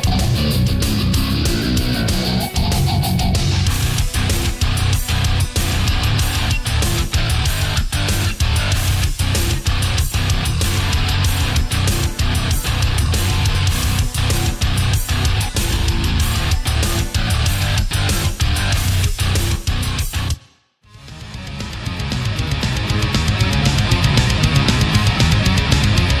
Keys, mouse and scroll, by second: 2.4 right click, 2.8 shift+right click, 3.4 shift+right click, 5.1 shift+right click, 5.7-8.2 shift+drag, 9.6 right click, 10.4 click, 11.5 middle click, 12.5 ctrl+z, 12.8 ctrl+middle click, 14.5 right click, 15.1 shift+right click, 15.5-16.5 shift+middle drag, 16.9 shift+right click, 17.3 shift+right click, 17.8 shift+right click, 18.1 shift+middle click, 18.3 shift+scroll down 1, 19.1 click, 20.8-22.4 drag, 23.7 click, 24.6-26.2 middle drag.